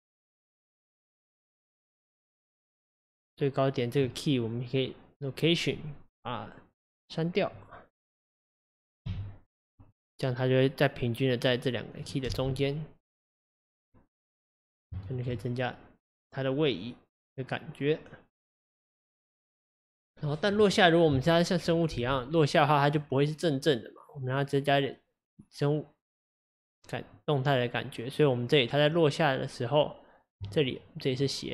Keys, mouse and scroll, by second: 0.0 click, 7.6 click, 9.9 x, 11.1 click, 12.3 space, 13.5-14.1 scroll down 3, 14.4-15.1 scroll down 4, 15.1 shift+middle click, 15.4-16.7 scroll up 2, 22.0 space, 23.0 click, 31.2 click.